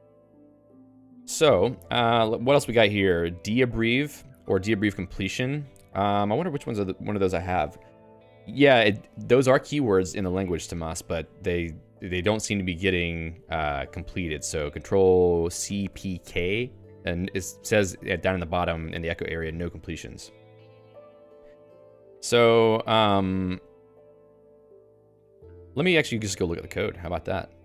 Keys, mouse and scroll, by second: 2.9-5.3 typing, 9.2-11.1 typing, 11.9 Return, 12.6 :, 13.2 e, 20.8 Escape, 21.4-23.6 typing, 25.5-26.4 j, 26.5-27.6 l.